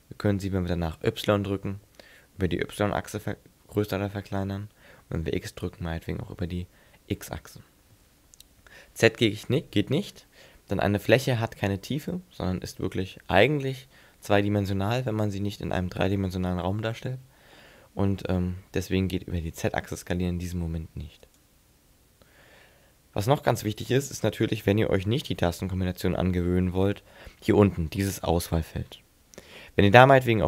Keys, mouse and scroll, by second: 21.4 right click.